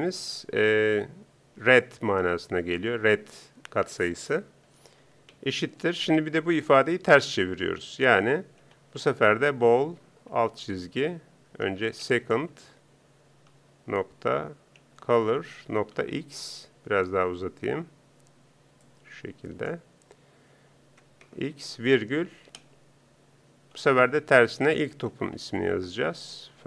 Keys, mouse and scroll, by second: 19.0 r, 19.0 ., 19.0 c.